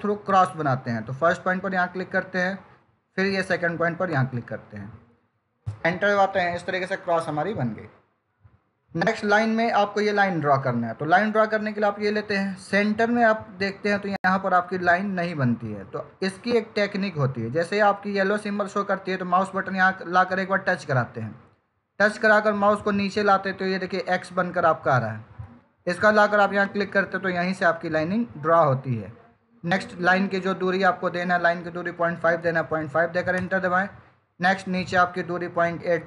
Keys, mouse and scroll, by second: 0.2 click, 4.0 click, 5.5 Return, 8.7 click, 26.5 click.